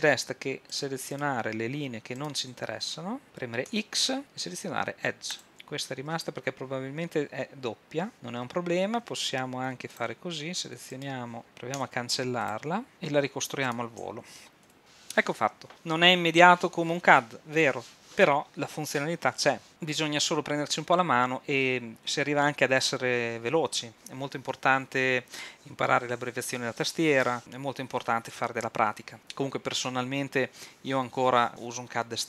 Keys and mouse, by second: 3.7 x, 11.8 x, 14.7 f, 14.8 a.